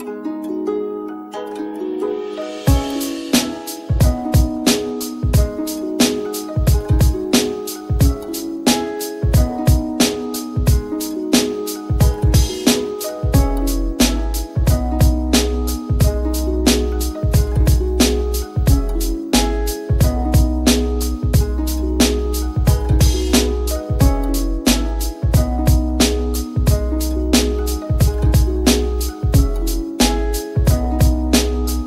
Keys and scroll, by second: 26.1 [, 26.9 [.